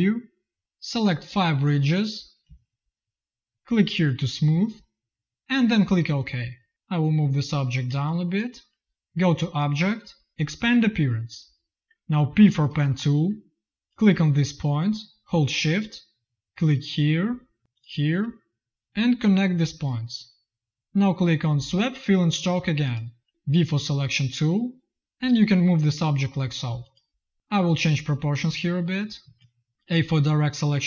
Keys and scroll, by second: 7.8 space, 12.2 p, 23.3 v, 29.1 z, 29.9 a.